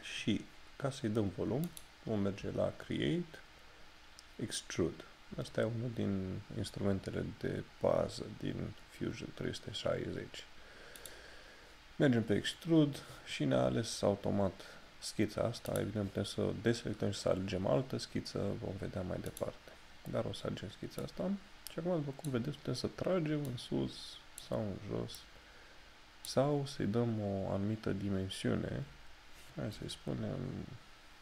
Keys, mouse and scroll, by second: 1.8 click, 11.1 click, 15.8 click, 19.4 click.